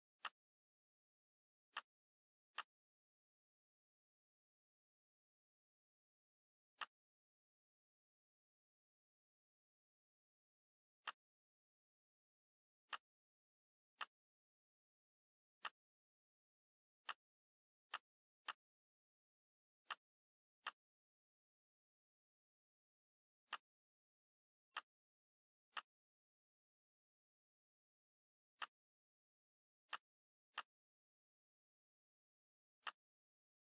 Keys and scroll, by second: 3.7 Right, 3.9 Right, 4.4 Right, 4.7 Right, 5.2 Right.